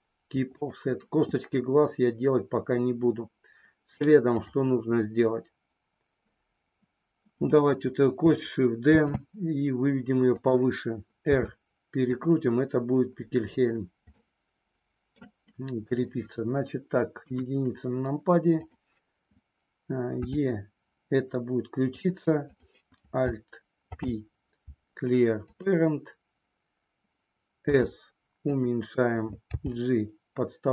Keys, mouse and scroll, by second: 4.4 click, 7.2 click, 8.9 shift+d, 11.2 r, 14.1-15.2 middle drag, 17.2 KP_1, 20.2 e, 22.0 click, 23.8 alt+p, 27.6 s, 29.4 g.